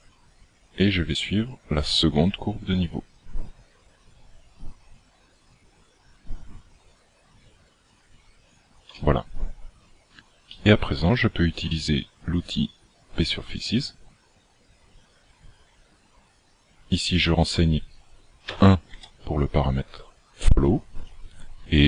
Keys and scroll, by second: 8.7 d, 9.0 d.